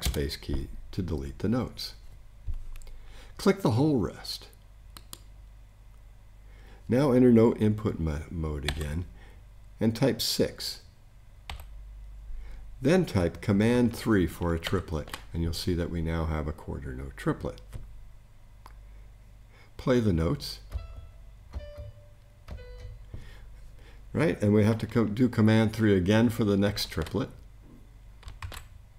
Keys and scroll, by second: 0.0 BackSpace, 8.7 n, 11.5 6, 14.6 super+3, 26.7 super+3, 28.4 super+z.